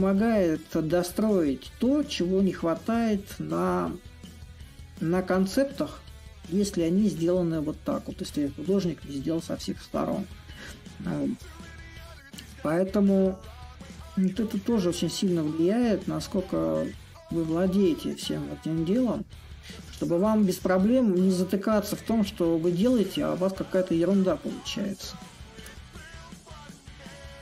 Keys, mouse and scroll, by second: 11.4-16.4 drag, 16.9-21.9 drag, 22.4-27.4 drag.